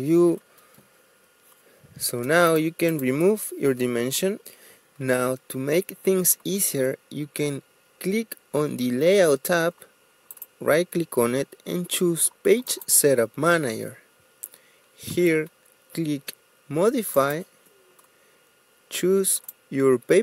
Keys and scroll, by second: 2.6 Delete.